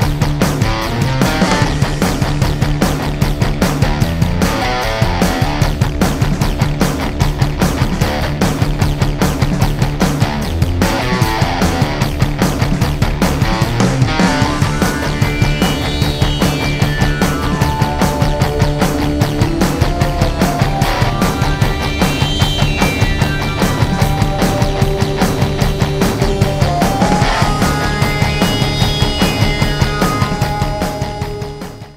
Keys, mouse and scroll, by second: 1.1-2.8 drag, 2.9 click, 3.3 alt+scroll down 1, 3.4 alt+scroll up 1, 4.4-5.8 drag, 5.8 click, 8.4-12.6 drag, 13.9 click, 15.7 alt+scroll down 1, 15.9-16.2 scroll up 2, 16.4 alt+scroll down 1, 17.0 alt+scroll up 1, 17.9 click, 19.3-23.2 drag, 24.1 alt+scroll down 1, 24.5 click, 24.9 alt+scroll down 1, 25.1 alt+scroll up 2, 25.5 alt+scroll down 1.